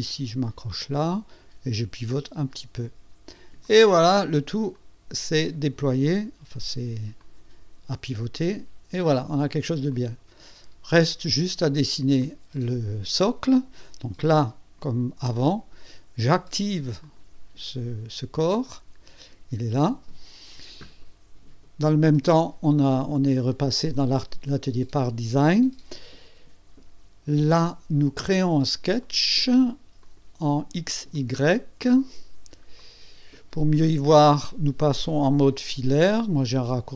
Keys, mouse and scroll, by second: 0.4 click, 2.4 click, 3.6 click, 3.8 click, 4.8 click, 5.9 click, 7.2-9.3 drag, 9.9 click, 12.2 click, 14.2 click, 14.8 right click, 17.0 click, 18.6 click, 29.0 click, 30.0 click, 31.1 click, 32.3 scroll up 1, 32.8-33.8 right drag.